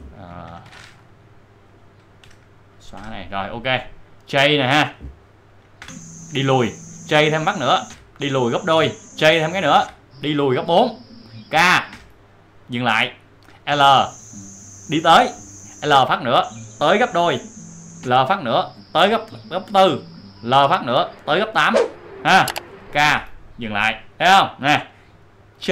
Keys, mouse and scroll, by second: 0.4 ctrl+shift+l, 1.6 click, 3.9 click, 5.8 j, 7.8 j, 9.8-10.5 typing, 11.9 typing, 13.7 typing, 15.9 typing, 18.0 typing, 20.5 typing, 23.0-23.7 typing, 25.6 typing.